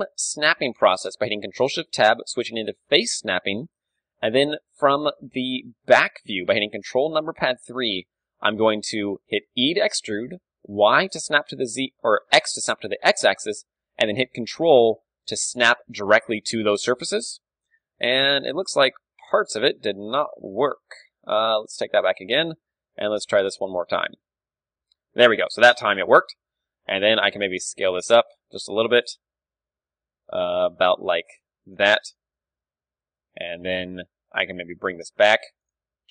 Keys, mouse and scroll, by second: 1.6 ctrl+shift+Tab, 4.8 ctrl+KP_3, 5.4-9.7 middle drag, 9.7 e, 15.4-16.9 drag, 16.9-20.9 middle drag, 18.7 z, 19.3 ctrl+z, 19.8 z, 20.1 g, 21.8-23.7 drag, 22.7 ctrl+KP_3, 23.4 g, 24.0 click, 24.9-28.3 middle drag, 26.5 KP_1, 27.4 s, 29.4-31.3 drag, 29.4 s, 31.8-33.8 drag, 32.3 ctrl+KP_3, 33.0 KP_3, 33.9 KP_1, 34.5 g, 36.0-36.1 drag, 36.0 g.